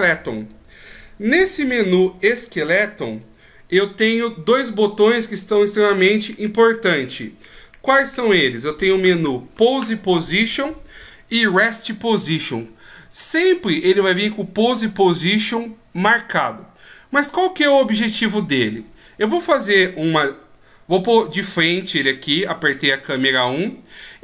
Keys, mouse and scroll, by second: 18.9 right click, 20.0 KP_1, 22.5-23.2 ctrl+scroll up 4.